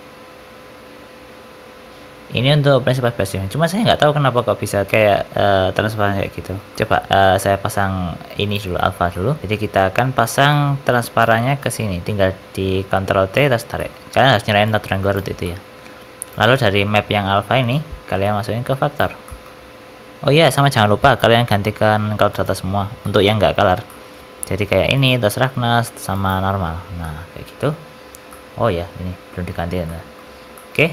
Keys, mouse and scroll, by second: 6.7 middle click, 6.7-7.0 scroll down 5, 7.0-8.6 scroll up 3, 7.4 click, 9.1 middle click, 9.4 scroll up 1, 9.4 shift+a, 10.4 click, 11.5 ctrl+shift+right click, 13.7 middle click, 14.6 click, 15.4 middle click, 15.6-16.2 scroll up 2, 16.2 click, 17.7 click, 19.2 middle click, 22.2 click, 23.0 middle click, 23.6 scroll down 3, 23.8 middle click, 24.9 click, 26.2 click, 27.0 scroll up 1, 27.0 middle click, 28.2 middle click, 29.8 middle click, 30.5 middle click, 30.8 scroll up 1.